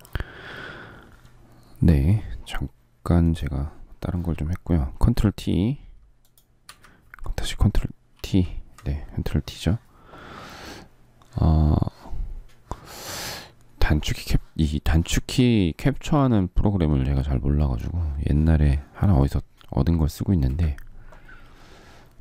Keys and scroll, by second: 6.4 Escape, 7.9 ctrl+t.